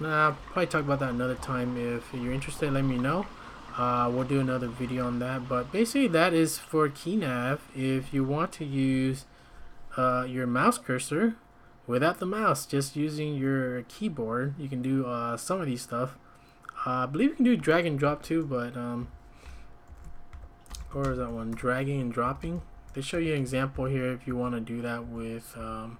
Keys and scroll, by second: 0.7 shift+z, 1.1 shift+q, 2.2 k, 8.9 `, 18.0-25.9 typing, 22.7 Escape.